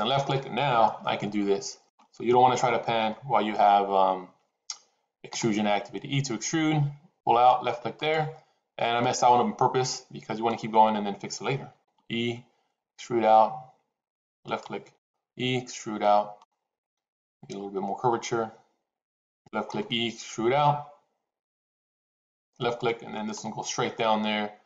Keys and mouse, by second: 0.7-1.8 shift+middle drag, 5.2 e, 11.6 e, 14.8 e, 19.6 e, 23.3 e.